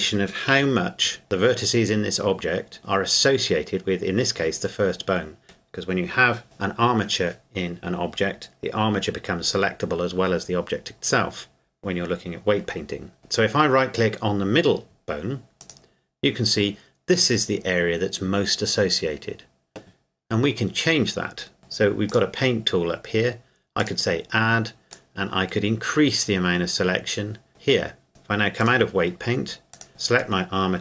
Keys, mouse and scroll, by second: 0.5 KP_1, 1.2 shift+middle click, 15.6 right click, 22.1 click, 29.7 right click.